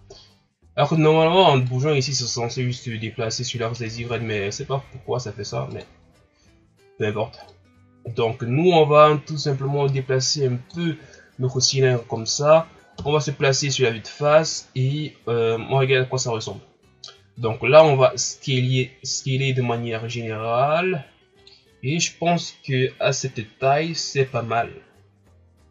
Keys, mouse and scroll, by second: 1.6-4.0 drag, 4.0 ctrl+z, 5.7-10.5 drag, 11.3-13.0 ctrl+scroll up 2, 13.0 KP_1, 16.6-17.4 scroll down 1, 17.4 s.